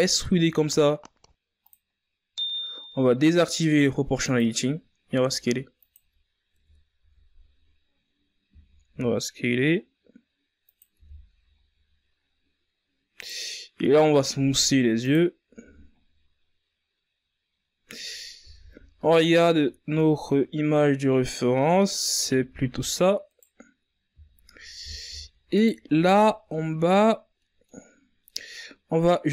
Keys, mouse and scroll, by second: 0.9 KP_1, 1.4 z, 2.9 s, 5.4 Tab, 5.8-6.5 scroll down 4, 6.5-7.6 scroll up 5, 7.6 right click, 8.5 w, 10.0 a, 10.4-10.9 scroll down 4, 12.8 ctrl+s, 13.0-13.8 scroll down 3, 13.8-14.3 scroll up 2, 14.3 z, 16.7 z, 17.2-17.6 scroll up 3, 17.6 right click, 18.5 z, 18.8 scroll down 1, 19.0 z, 19.6-19.9 scroll down 1, 19.9 right click, 20.2 Tab, 20.6 middle click, 21.4-21.8 scroll up 2, 21.8-23.4 middle drag, 23.4 right click, 24.8 ctrl+z, 25.3 right click, 26.4 right click, 27.3 ctrl+z, 27.6 middle click, 28.5-29.3 drag.